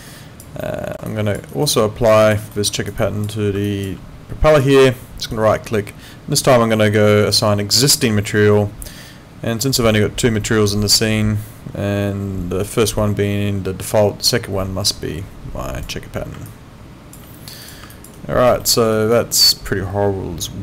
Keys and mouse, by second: 0.6 alt+middle click, 1.1 alt+click, 1.5 alt+right click, 1.7 alt+click, 2.5 alt+middle click, 2.7 alt+right click, 3.0 alt+click, 3.6 alt+click, 5.3 right click, 17.6 click, 17.9 alt+click, 18.2 alt+right click, 18.6 alt+middle click, 18.9 alt+right click, 19.4 alt+click.